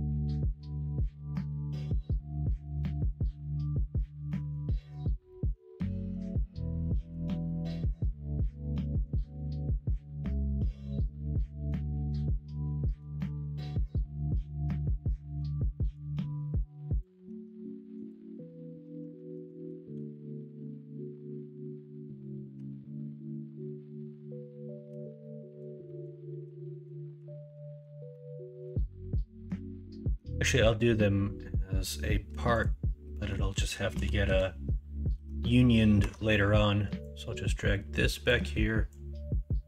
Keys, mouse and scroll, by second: 2.5 middle click, 4.0 middle click, 4.6 shift+middle click, 5.3 middle click, 5.8 shift+middle click, 6.9 middle click, 7.4 shift+middle click, 11.7-12.9 middle drag, 13.8-15.3 middle drag, 15.7 middle click, 17.2 Tab, 19.3 KP_1, 19.9 KP_3, 22.5 Tab, 24.9 Tab, 25.2-25.6 middle drag, 25.8 middle drag, 26.6 middle click, 28.1 middle click, 30.0 shift+a, 33.2 middle click, 33.9 KP_1, 34.2 KP_3, 35.1 alt+z, 36.0 Tab, 37.2-39.6 drag.